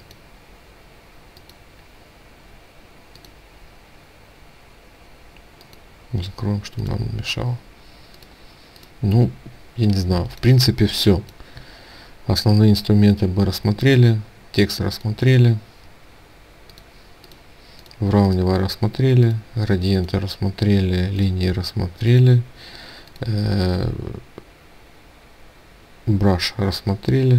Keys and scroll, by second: 9.5 ctrl+space.